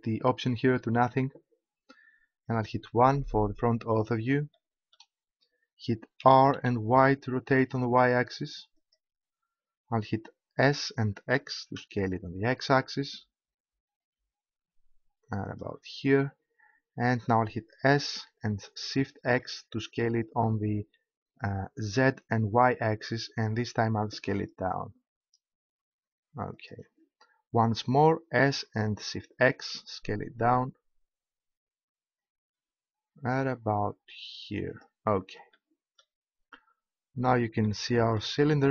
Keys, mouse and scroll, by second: 2.9 KP_1, 6.2 r, 8.9-11.5 drag, 10.8 s, 15.6-17.3 drag, 17.8 s, 26.7-28.4 drag, 28.4 s, 35.5 click.